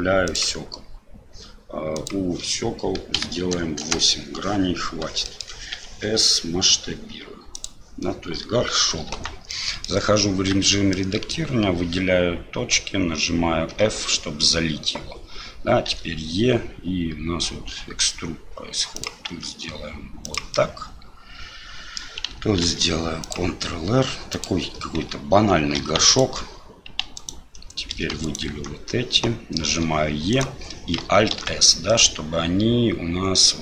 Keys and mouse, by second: 1.9-4.3 drag, 5.3 shift+click, 9.1 Tab, 9.5 click, 10.5 1, 10.9 click, 20.6-22.0 middle drag, 22.6 ctrl+r, 25.8 2, 26.1 alt+click, 27.1 alt+click, 27.9 3, 28.2 alt+click, 29.7 e, 31.3 alt+s.